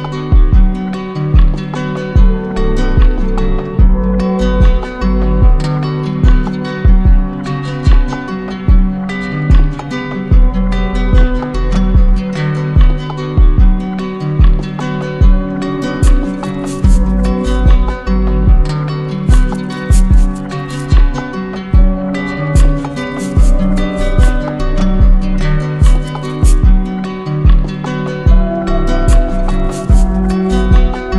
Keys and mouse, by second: 0.6 d, 1.8-3.1 shift+drag, 3.1 right click, 3.8 shift+click, 5.6 right click, 7.0 right click, 8.2 right click, 9.1 alt+click, 9.9 alt+click, 10.6 alt+click, 12.0 right click, 12.4 shift+right click, 13.1 right click, 13.6 right click, 13.7 alt+right click, 15.8 click, 17.1-17.7 typing, 18.7 click, 20.5 right click, 21.2 alt+right click, 24.5 alt+right click, 25.3 alt+right click, 26.8 right click, 27.9 right click, 28.5 shift+right click, 28.6 shift+right click.